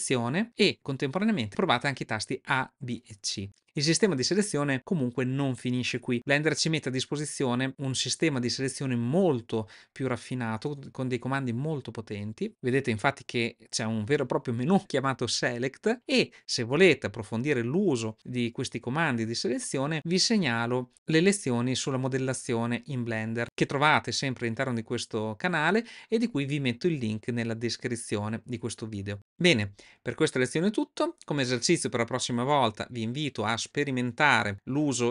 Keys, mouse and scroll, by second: 12.5 click.